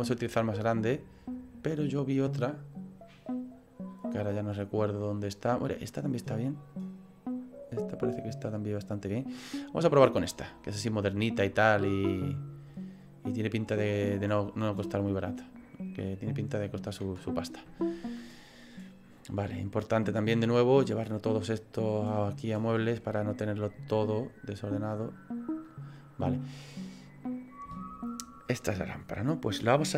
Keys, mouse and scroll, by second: 20.4 right click, 20.4 click.